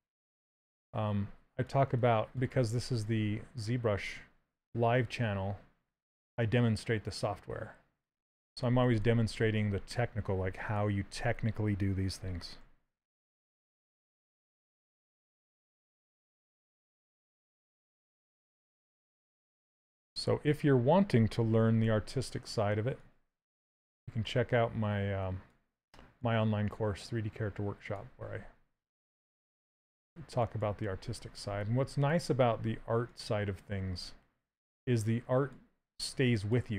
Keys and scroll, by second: 13.2 d, 19.8 shift+d, 21.6 shift+f, 31.5 s.